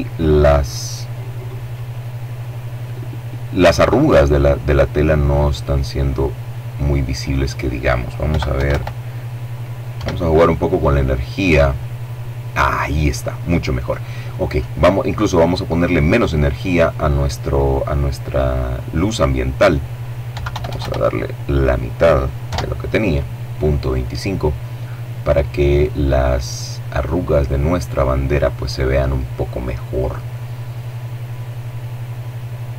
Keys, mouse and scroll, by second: 4.0-6.5 drag, 6.9 KP_Decimal, 7.2 KP_5, 7.3 KP_Enter, 8.6 F12, 14.5 click, 19.0 KP_Decimal, 19.2 KP_2, 19.3 KP_5, 19.5 KP_Enter, 21.1 F12, 31.7 click.